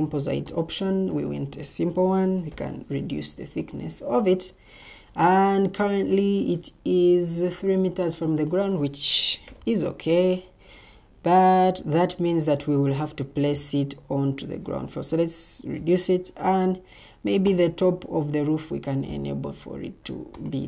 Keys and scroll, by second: 1.6-2.9 typing, 9.0-9.9 typing.